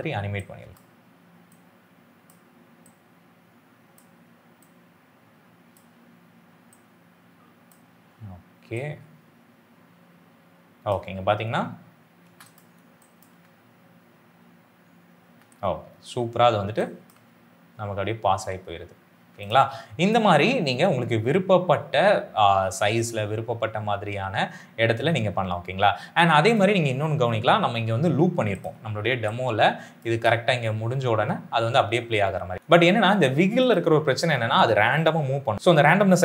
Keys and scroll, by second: 10.9 space, 30.0 space.